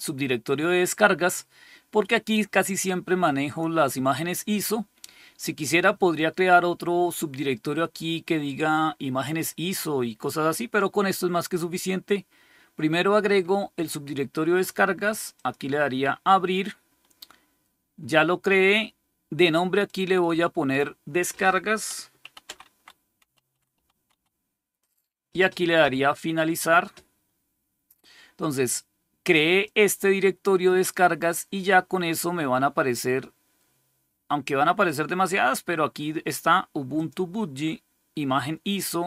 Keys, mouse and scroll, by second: 15.2 click, 19.3 click, 19.7 click, 21.9-24.5 typing, 26.3 click, 26.9 click, 27.2-29.7 drag, 36.8 click.